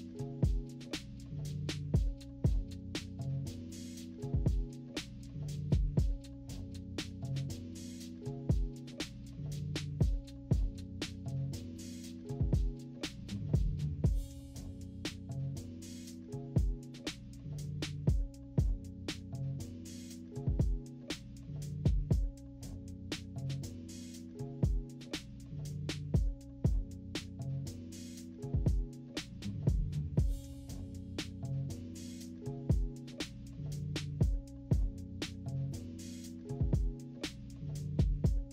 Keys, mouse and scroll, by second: 2.0 -, 2.1-2.5 scroll up 4, 2.4 =, 2.6-3.9 drag, 4.1 -, 4.2 =, 4.5-7.7 drag, 7.9 -, 8.2 =, 8.2-8.6 scroll up 2, 8.7 =, 9.2-11.8 drag, 11.8 -, 12.2 =, 12.6-14.3 drag, 14.3 -, 14.6 =, 14.7 scroll up 1, 14.8 =, 15.2 click, 16.1-17.1 drag, 16.9-18.2 typing, 17.4 click, 17.7 click, 18.4 scroll down 1, 18.7-20.1 drag, 20.2 -, 20.4 scroll up 1, 20.4 =, 20.7-22.8 drag, 22.8 -, 23.0 scroll down 1, 23.0 =, 23.1-23.4 scroll up 1, 23.4 click, 24.4-26.0 drag, 26.0 -, 26.1 scroll up 1, 26.1 =, 26.3 scroll down 1, 26.4 click, 27.2-28.7 drag, 28.7 -, 28.9 =, 29.2 click, 30.1 -, 30.2 middle click, 30.3 =, 30.7 click, 31.6 -, 31.8 =, 32.3-34.4 drag, 34.4 ctrl+-, 34.6 ctrl+=, 34.7 scroll up 2, 34.8-36.7 drag, 36.8 ctrl+-, 36.9-37.5 scroll down 6, 37.0 ctrl+=, 37.2 ctrl+=, 38.1 click.